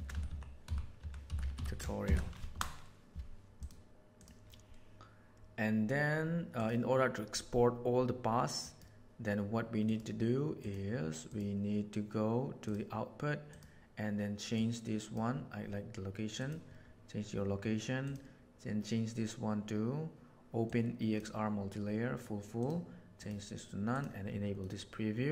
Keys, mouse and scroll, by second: 8.6 click, 9.8 click, 11.3 click, 12.6 click, 13.4 click, 14.5 click, 18.1-19.3 middle drag, 19.3-21.1 drag, 22.5-23.2 drag, 23.9 drag, 24.7 middle click.